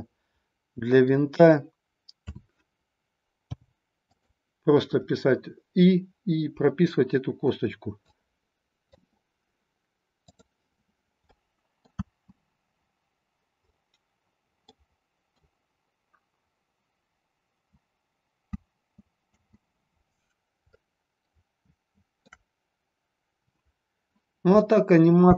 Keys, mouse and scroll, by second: 2.2 a, 3.3 i, 7.9-9.1 drag, 11.2-11.9 middle drag, 12.0 space, 14.7-15.4 middle drag, 18.6 space, 19.3 space, 20.7-22.3 shift+middle drag.